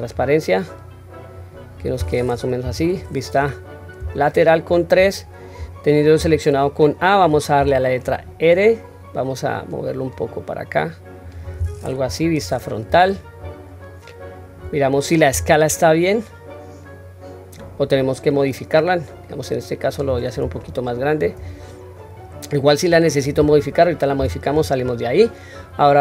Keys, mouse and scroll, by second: 0.2-1.8 drag, 2.6 KP_3, 3.4-3.9 scroll up 1, 4.0 scroll up 2, 4.2 shift+middle click, 6.2 a, 7.6 r, 12.1 KP_1, 12.9-13.3 scroll down 1, 13.9 scroll down 3, 15.1 scroll up 1, 15.3 s, 20.6-21.2 shift+middle drag, 21.8-23.7 scroll down 1, 24.2 Tab.